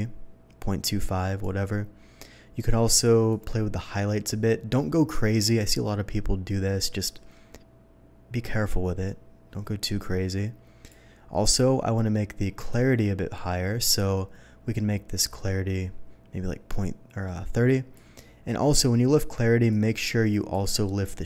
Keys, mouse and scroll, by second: 3.3-10.9 drag, 12.7-17.9 drag, 19.7 click.